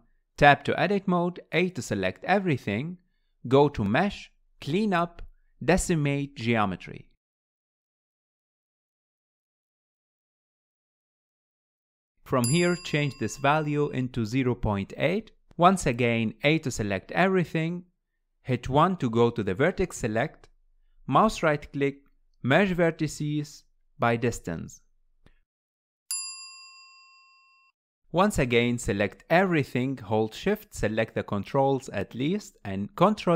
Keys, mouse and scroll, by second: 1.4 Tab, 2.7 a, 4.7-7.8 drag, 12.4-15.4 drag, 18.2 a, 20.2 1, 21.9-25.7 right drag, 27.9 click, 31.4 shift+click, 32.2 shift+drag, 32.9 middle click, 33.1 ctrl+p.